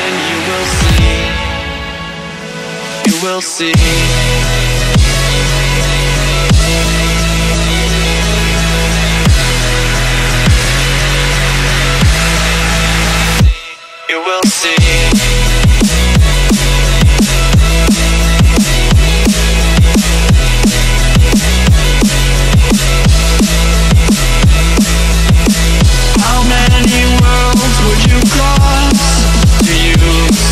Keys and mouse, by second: 0.0 click, 0.5 shift+Down, 0.8 shift+Left, 1.3 click, 1.7 shift+Down, 2.7 shift+Right, 3.3 click, 4.5 space, 4.7 click, 4.9 space, 5.3 click, 6.9 click, 10.1 Up, 11.6 click, 12.7 Down, 14.7 click, 15.9 Down, 17.9-23.9 drag, 25.0 click.